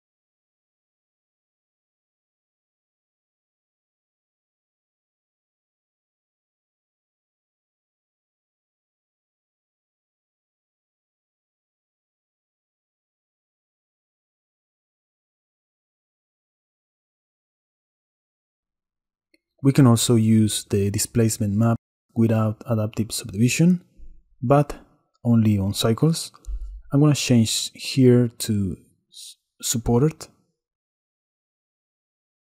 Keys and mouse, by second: 0.3 middle click, 0.7 middle click, 2.1 middle click, 2.8 middle click, 4.0-5.3 drag, 6.8 click, 7.3 click, 8.0 middle click, 10.6 click, 10.8 click, 10.9 middle click, 11.6 middle click, 12.1 middle click, 13.6-16.6 shift+drag, 16.6-18.3 shift+middle drag, 18.3 shift+click, 18.8 middle click, 21.2 middle click, 22.3 click, 23.2-23.7 shift+drag, 25.9 click, 27.9-30.7 drag, 32.0-32.3 shift+drag, 32.3 shift+middle drag.